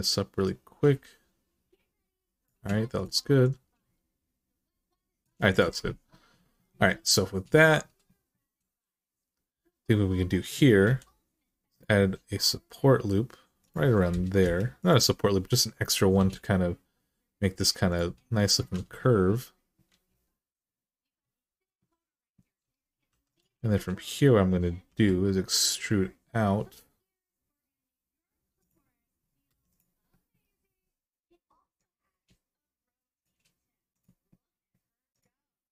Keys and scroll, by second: 10.6 k, 14.2 Return, 15.9 g, 18.6 alt+z, 19.7 alt+z, 22.9 2, 24.7 e.